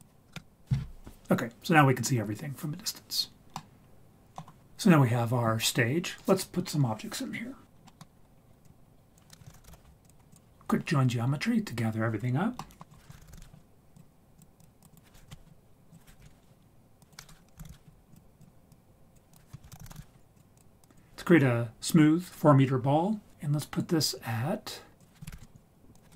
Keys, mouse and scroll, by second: 0.3 KP_0, 3.5 middle click, 7.7-8.6 scroll down 3, 7.8 middle click, 8.6 click, 9.3 click, 9.5 shift+a, 12.6 middle click, 12.9 click, 13.1 shift+a, 14.6 click, 14.9 click, 15.9 click, 17.0-18.4 drag, 17.6 o, 18.7 click, 19.6 shift+a, 19.8 s, 20.8 click, 25.0 click, 25.9 click.